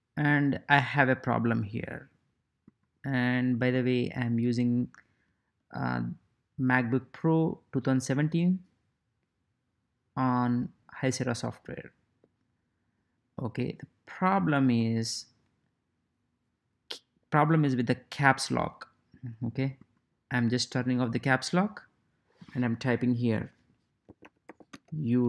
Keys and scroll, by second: 23.8-25.2 typing.